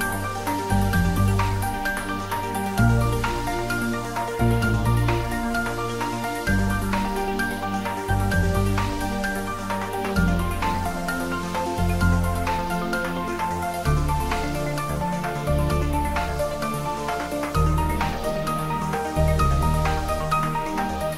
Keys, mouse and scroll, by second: 0.1 click, 3.0-3.9 middle click, 4.2 g, 4.6 x, 6.2 click, 6.7-8.8 middle drag, 9.7 Tab, 10.3-18.4 middle drag, 18.4-19.4 scroll down 1, 19.4-20.3 middle drag, 21.0-21.1 scroll up 1.